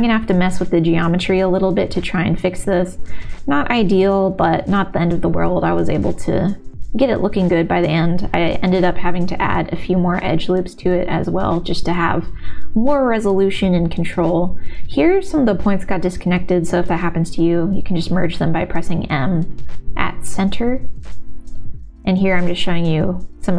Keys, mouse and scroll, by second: 0.1 click, 1.8 shift+v, 2.3 click, 2.7 shift+v, 3.3-7.4 middle drag, 7.8 click, 8.0 middle click, 8.8 v, 10.0 g, 10.9 click, 11.0 g, 11.5 middle click, 13.3 shift+v, 14.3 shift+v, 15.2 shift+v, 16.5 m, 17.5 ctrl+z, 18.1 m, 19.7 g, 20.2 middle click, 21.3 k, 22.7-23.5 middle drag.